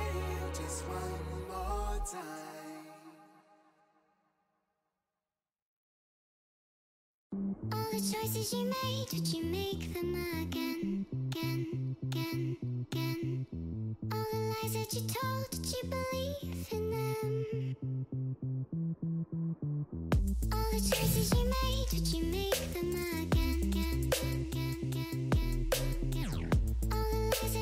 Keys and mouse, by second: 0.4 click, 0.7 click, 1.2 click, 1.5 click, 3.0 space, 3.0 click, 4.5 space, 4.6 click, 5.6 space, 6.1 space, 9.1 click, 10.7 click, 11.2 click, 14.4 click, 15.2 click, 18.6 click, 24.0 Return, 25.7 ctrl+[, 26.3 ctrl+[, 26.7 ctrl+].